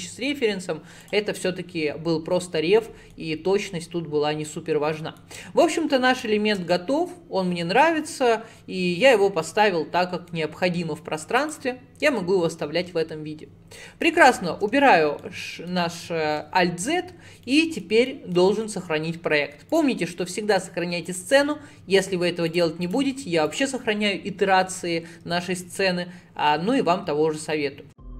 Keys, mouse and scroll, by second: 0.2-0.8 scroll down 6, 1.1 click, 1.4-3.4 middle drag, 3.4 scroll up 4, 3.7-4.7 middle drag, 4.7 scroll down 2, 5.0 middle click, 5.8-6.3 scroll down 1, 6.3-8.6 shift+middle drag, 8.6-9.0 scroll up 2, 9.0-9.5 scroll down 2, 9.5-11.4 middle drag, 11.4 click, 14.2 alt+z, 15.2-17.1 shift+middle drag, 17.1 scroll up 2, 17.5-19.8 middle drag, 19.8-22.9 drag.